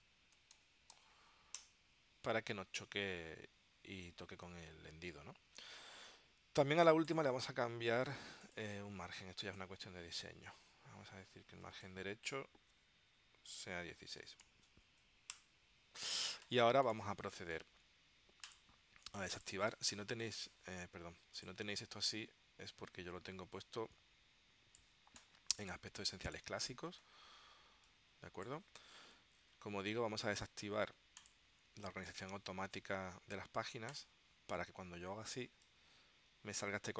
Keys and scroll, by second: 0.3-1.6 typing, 1.7 Return, 14.1-15.0 typing, 15.5 Return.